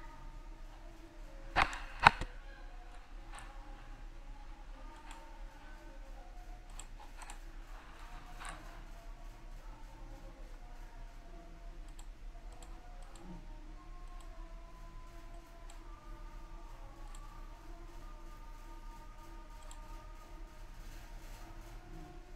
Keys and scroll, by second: 9.9 ctrl+z.